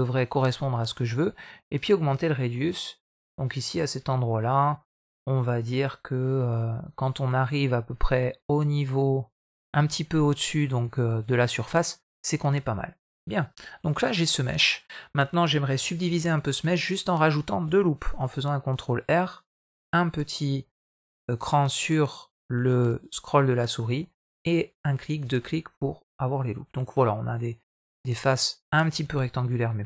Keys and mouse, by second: 1.0 middle click, 6.1-9.2 drag, 9.6 middle click, 11.5-12.8 middle drag, 15.9 Tab, 16.3 middle drag, 17.8 ctrl+r, 25.3-26.6 middle drag, 28.0 middle click, 29.1 Tab, 29.7 middle click.